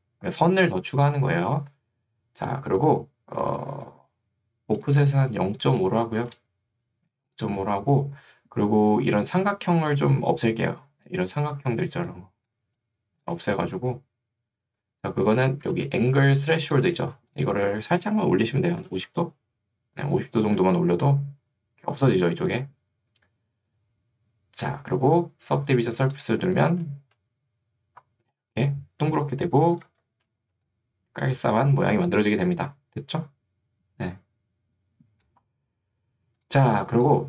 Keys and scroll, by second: 6.1 5, 6.3 Return, 11.7 ctrl+2, 13.5 Escape, 15.9 ctrl+2, 17.1 Escape, 18.9 0, 29.9 a, 30.7 3.